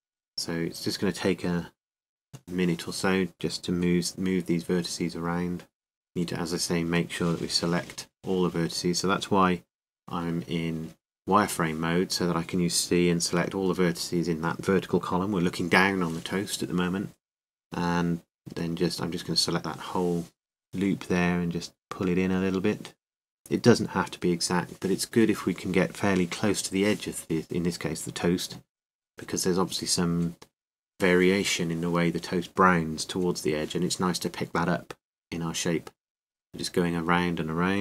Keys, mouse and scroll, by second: 0.0 ctrl+z, 0.0-1.4 right drag, 0.0 g, 1.9 c, 3.2-5.0 right drag, 8.4 g, 12.0 a, 12.1-13.7 drag, 12.5 c, 13.7 right click, 14.5 g, 18.3 ctrl+r, 24.2-27.1 drag, 24.2 a, 27.1 c, 28.3-30.2 right drag, 29.5 g, 35.2-36.4 middle drag, 35.2 a, 36.0 c, 36.4-37.8 right drag, 37.1-37.8 drag.